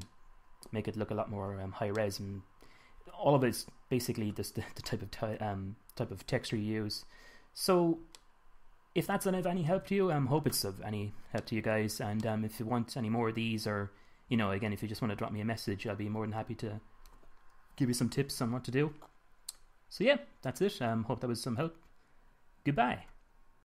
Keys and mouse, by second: 2.6-10.2 middle drag, 10.2 KP_1, 14.7-17.0 middle drag.